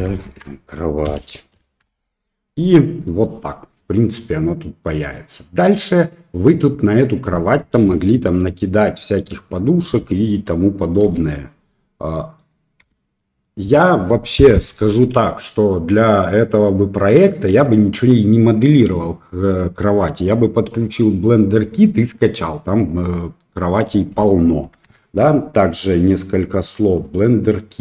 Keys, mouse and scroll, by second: 0.0 BackSpace, 2.9-3.7 middle drag, 4.4 middle click, 5.7-6.5 middle drag, 7.0 middle click, 7.7 KP_1, 9.5 click, 11.0 h, 12.0 click, 12.8 h, 13.1 middle drag, 15.1-15.5 middle drag, 16.1-17.3 middle drag, 20.8 middle click, 23.5 middle click, 24.9 shift+middle drag.